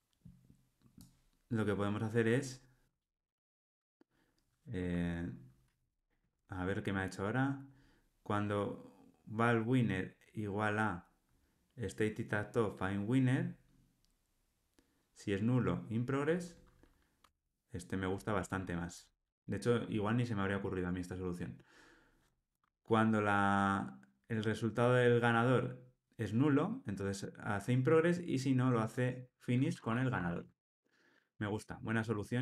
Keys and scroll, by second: 17.2 Tab, 30.3 alt+super+l.